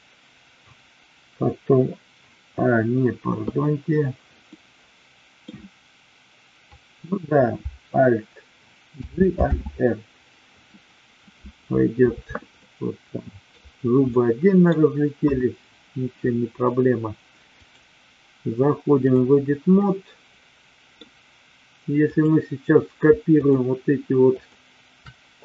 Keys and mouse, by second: 4.6-5.4 middle drag, 8.9 alt+g, 9.4 alt+r, 12.7-13.6 middle drag, 14.1-14.7 middle drag, 15.2 KP_1, 17.6-19.3 drag, 19.8-20.9 middle drag, 21.9 click, 23.3 shift+click.